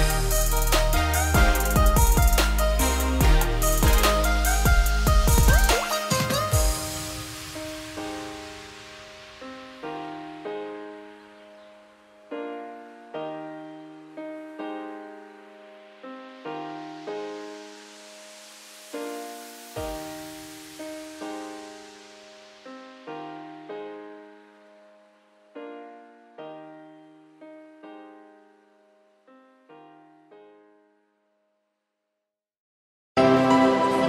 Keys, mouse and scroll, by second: 3.9-4.5 scroll up 2, 4.5 g, 7.2 z, 7.4 scroll down 2, 7.6-8.3 middle drag, 8.3-8.8 scroll down 2, 8.8 click, 9.0-10.2 middle drag, 10.2 ctrl+z, 10.6 ctrl+z, 11.0 click, 11.2 scroll down 2, 11.3-13.9 middle drag, 13.9 `, 14.4-15.3 scroll up 3, 15.3 click, 15.8 click, 16.3 shift+click, 16.7 Tab, 16.9 scroll down 3, 17.0 middle click, 17.7-18.2 scroll up 2, 18.2 middle click, 18.6 s, 24.4 `, 24.9 z, 25.4 g, 28.9-29.5 scroll up 1, 29.5 z, 30.6 scroll down 4, 30.8-33.7 middle drag, 33.7 s.